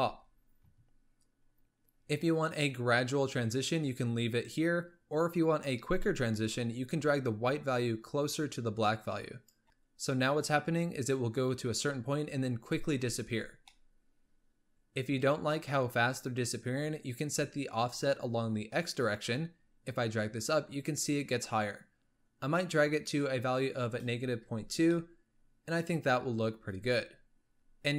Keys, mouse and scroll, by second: 6.5-9.6 drag, 9.6-10.8 shift+middle drag, 13.0 space, 13.9-14.7 middle drag, 19.2-22.2 drag, 24.7 scroll down 1, 25.0-26.7 middle drag, 26.7 space.